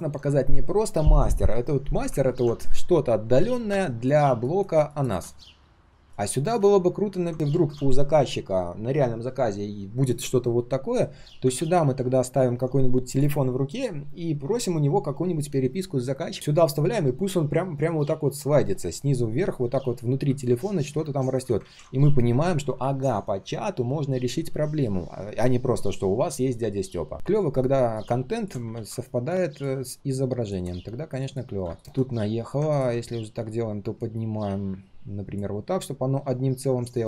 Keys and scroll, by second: 21.6 ctrl+z, 28.7 ctrl+z.